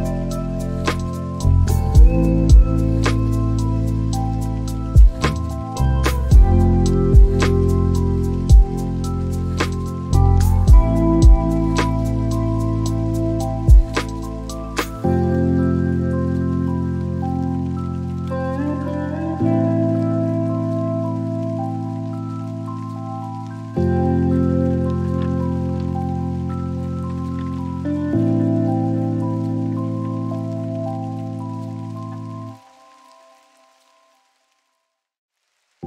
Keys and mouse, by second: 4.6 ctrl+click, 5.7 click, 7.7 x, 10.4 y, 16.9 ctrl+click, 20.7 g, 21.3 y, 28.9 click, 31.2 g, 32.5 y.